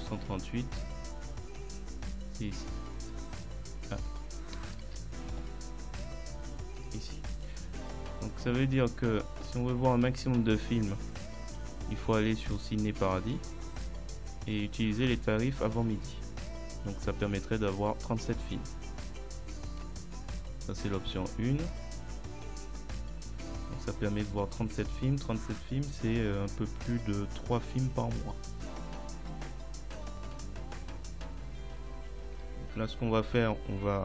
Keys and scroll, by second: 4.9 ctrl+z.